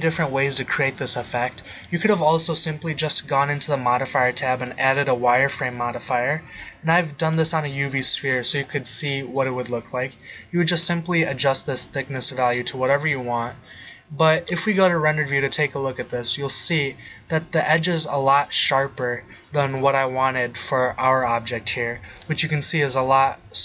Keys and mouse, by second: 8.6-9.6 middle drag, 12.5-13.0 middle drag, 13.3-13.8 middle drag, 13.8 middle click, 14.4 shift+z, 20.4-20.7 middle drag.